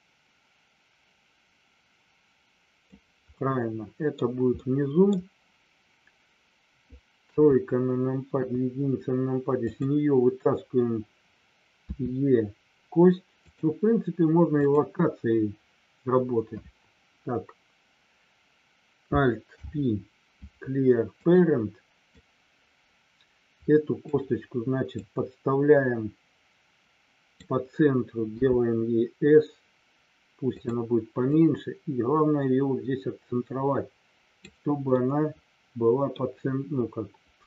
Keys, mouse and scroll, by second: 3.3 middle click, 3.3 scroll up 1, 4.5 middle click, 7.3 KP_3, 8.4 KP_1, 9.6 click, 13.4 click, 14.5 click, 19.5 alt+p, 22.1-24.0 drag, 25.0-27.4 drag, 30.5 click, 31.3-34.4 drag, 35.0-36.3 middle drag.